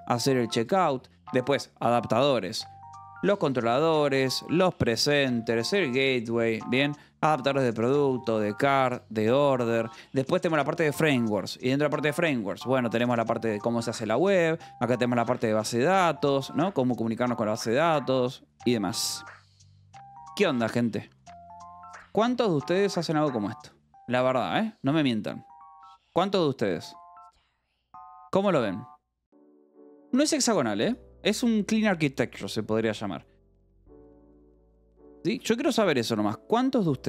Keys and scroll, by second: 0.0-8.6 typing, 0.4 Escape, 2.1 Escape, 3.7 Escape, 7.7 Escape, 8.7 Escape, 9.5 Escape, 9.7 j, 10.8 shift+v, 11.0 Escape, 11.2 j, 11.9 k, 12.6 j, 13.4 Escape, 14.0 j, 14.7 k, 15.3 j, 15.8 Escape, 16.1 k, 33.2-34.4 typing.